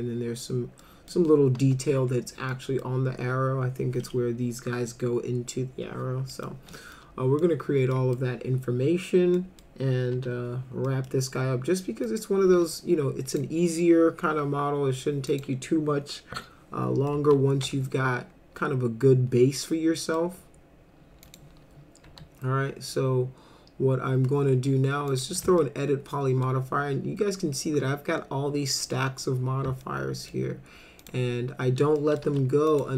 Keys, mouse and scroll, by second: 0.8 middle drag, 1.6 F4, 2.5 middle click, 6.3 middle drag, 7.0-7.4 middle drag, 7.9 middle click, 9.3 middle drag, 10.1 F4, 10.9 middle drag, 12.1 click, 13.3 click, 15.3 click, 17.1-20.2 middle drag, 21.2 click, 22.0 e, 25.1 click, 25.6 alt+middle click, 29.8 alt+middle click, 31.0 click, 32.0 middle click, 32.3 F4, 32.7 click.